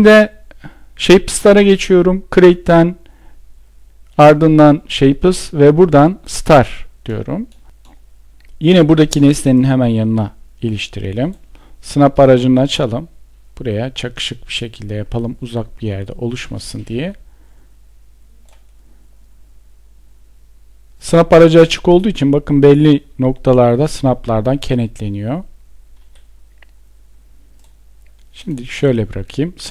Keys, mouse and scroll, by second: 10.3 Escape.